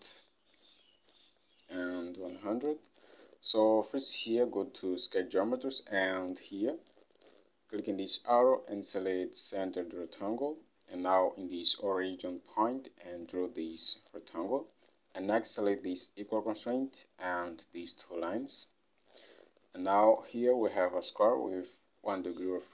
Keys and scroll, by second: 2.8 ctrl+Tab.